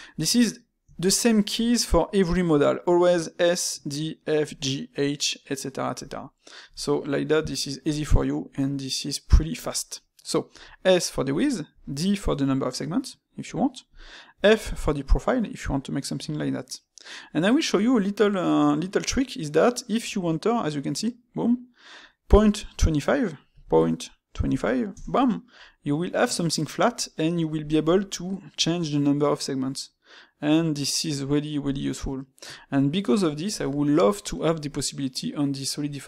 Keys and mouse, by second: 0.9-3.9 shift+middle drag, 6.2-9.2 shift+middle drag, 31.9-34.9 middle drag.